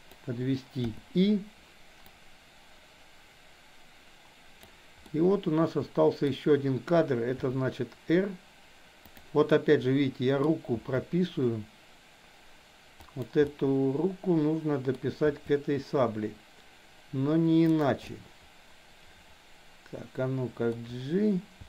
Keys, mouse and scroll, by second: 0.8 i, 2.2-4.8 drag, 5.1-6.3 middle drag, 7.3 r, 9.4 middle click, 10.3 scroll down 1, 10.8 r, 13.4-14.9 middle drag, 15.3 r, 18.1-20.7 middle drag, 21.4 g.